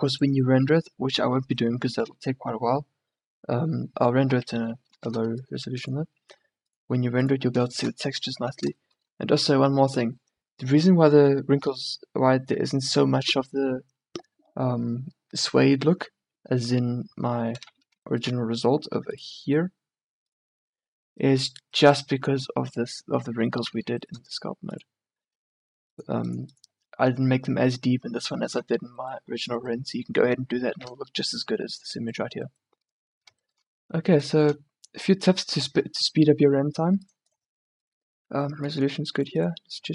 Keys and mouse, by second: 1.7-4.7 middle drag, 5.1 shift+b, 8.5 a, 28.7 middle click, 34.3-36.0 drag, 36.2 middle click, 37.1-39.9 drag.